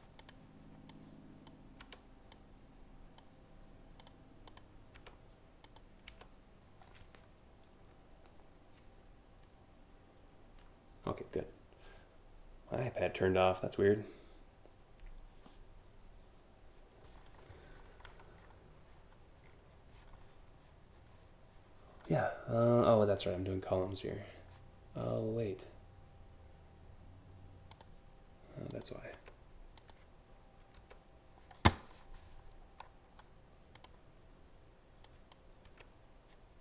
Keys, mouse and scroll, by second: 0.5 click, 1.4 Delete, 1.9-2.8 drag, 3.6 click, 4.1 click, 4.6 Delete, 5.3 click, 5.7 Delete, 17.7 scroll up 2, 18.0 scroll down 2, 19.0 scroll up 1, 27.3 click, 28.3 click, 29.4 click, 30.4 Delete, 32.4 scroll down 1, 33.3 click, 34.6 click, 35.4 Delete, 36.5 click.